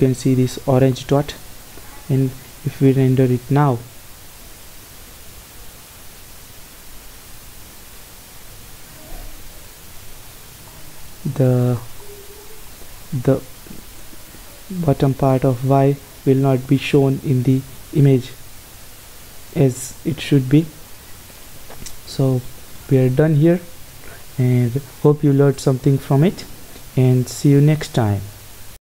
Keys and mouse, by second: 3.3 F12, 20.8 click, 21.4 click, 22.5 Escape.